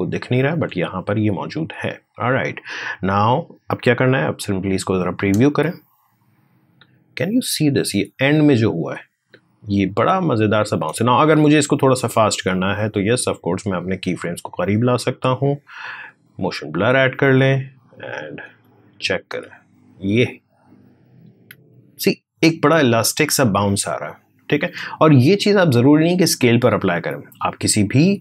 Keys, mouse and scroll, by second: 1.3-5.6 drag, 11.1-15.8 drag, 18.2 space, 24.4 space.